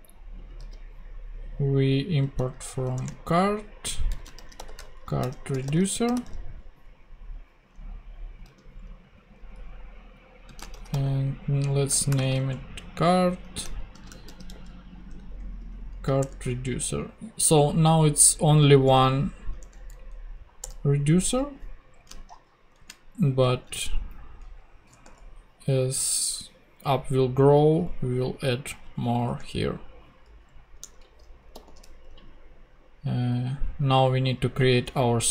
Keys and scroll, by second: 0.7 super+x, 2.1-6.2 typing, 8.4 super+x, 10.2-12.6 typing, 13.7-15.3 typing, 16.2 Return, 18.8 alt+Return, 19.9 alt+Down, 20.6 Return, 22.7 alt+shift+Up, 23.4 alt+shift+super+Up, 23.5 alt+shift+super+Right, 24.4 super+Down, 29.2 ;, 30.8 super+Tab, 31.5 super+f.